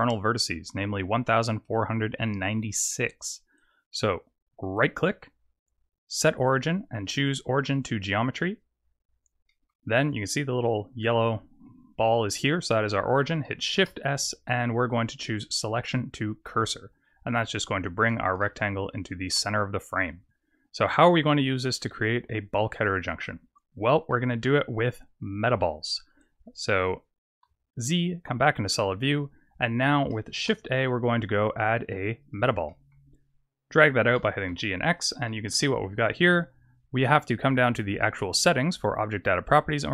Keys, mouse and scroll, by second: 4.7 right click, 9.5 middle click, 13.7 shift+s, 18.4 shift+middle click, 19.5 scroll up 3, 24.0 middle click, 24.7 scroll down 4, 27.4 z, 28.7 middle click, 30.4 shift+a, 32.7 middle click, 34.0 g, 35.2 shift+middle click, 35.8 scroll up 5, 38.4 click.